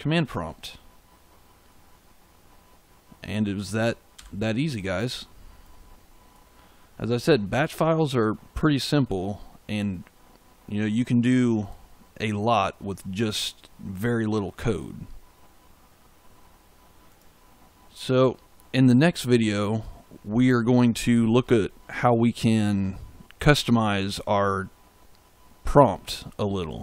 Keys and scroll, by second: 4.1 f.